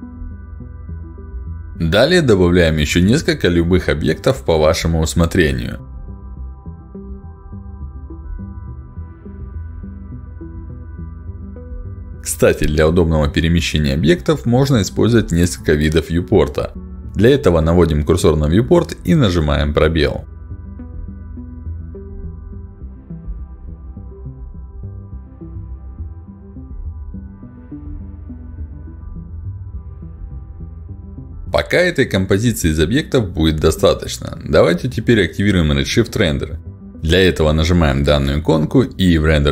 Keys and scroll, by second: 1.5 w, 3.0 space, 6.9 r, 10.5 w, 11.1 e, 11.7 w, 12.1 space, 20.3 space, 24.4 r, 27.5 w, 28.7 r, 29.0 w.